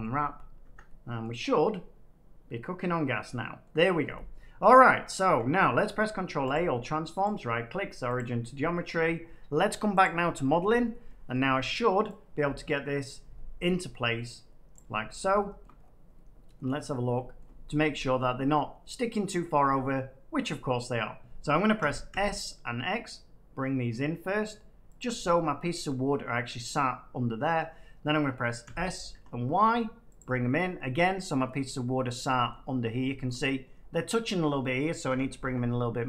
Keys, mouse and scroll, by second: 0.6 Tab, 1.1 middle click, 1.3-2.0 scroll down 3, 2.1 middle click, 3.5 middle click, 4.7 middle click, 5.8 ctrl+a, 5.8 middle click, 6.4 click, 7.2 right click, 8.1 click, 9.9 click, 11.2 scroll, 14.7 click, 15.5 shift+scroll, 15.7 middle click, 16.7 middle click, 17.1 shift+middle click, 17.2 shift+middle click, 17.3 shift+middle click, 17.8 middle click, 18.2 middle click, 18.6 middle click, 19.1 middle click, 20.3 middle click, 21.7 s, 22.0 x, 24.9 click, 25.6 middle click, 27.5 middle click, 28.6 s, 29.0 y, 30.1 click, 30.7 middle click, 31.7 middle click, 32.4 shift+middle click, 32.5 shift+middle click, 32.5 middle click, 33.0 middle click, 33.2 shift+middle click, 35.0 s, 35.4 y.